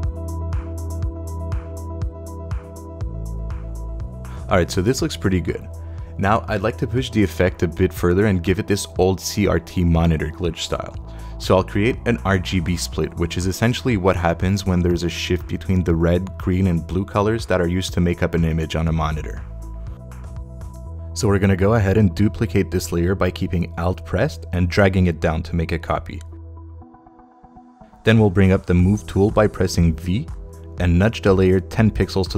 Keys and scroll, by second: 0.1 shift+super+Right, 0.4 super+d, 1.1 shift+super+Right, 1.4 Left, 1.6 Right, 1.9 super+d, 30.8 v.